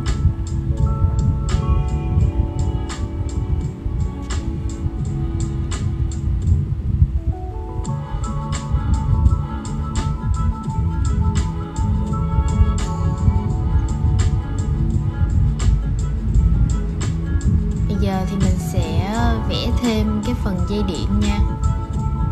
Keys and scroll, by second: 17.6 super+z, 18.6 super+z, 19.2 super+z, 20.2 shift+super+z.